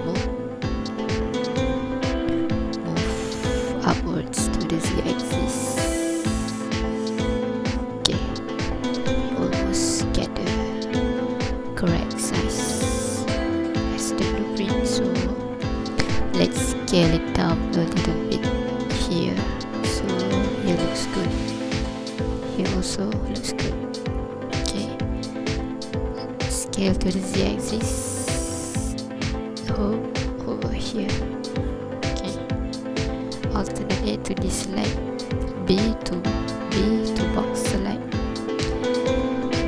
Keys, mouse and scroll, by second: 2.3 click, 8.2 scroll up 2, 8.6 ctrl+click, 9.1-10.6 scroll down 1, 12.7 scroll down 3, 13.0 scroll up 1, 13.6 ctrl+click, 14.1-15.0 scroll up 1, 15.6 s, 19.3 click, 19.8-20.8 scroll up 5, 20.8-21.9 scroll down 4, 21.9-22.3 scroll up 4, 23.0-23.4 scroll down 5, 24.2 ctrl+click, 24.7 scroll up 2, 25.2 ctrl+click, 25.7 scroll down 1, 26.8 s, 27.1 z, 31.0 click, 33.7 alt+a, 37.3 b, 38.4 scroll up 2, 39.2 scroll down 2.